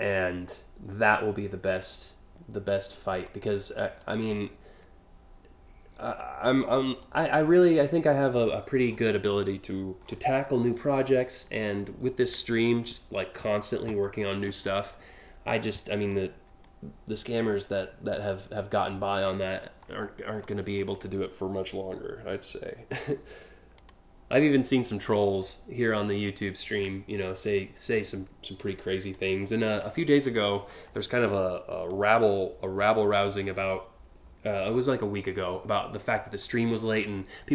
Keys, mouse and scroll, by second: 2.8 click, 3.6-6.6 drag, 7.0 scroll down 1, 8.0-8.6 scroll down 2, 9.6 scroll down 1, 10.8 click, 14.3-14.8 scroll up 2, 15.6 ctrl+click, 16.3-17.7 drag, 18.9 click, 19.4 scroll down 1, 20.0-20.6 scroll down 2, 21.6 scroll up 1, 23.4 click, 28.7-29.3 drag, 29.8 scroll down 2, 30.2-30.6 scroll up 4, 31.5-32.6 drag, 33.1 scroll up 3.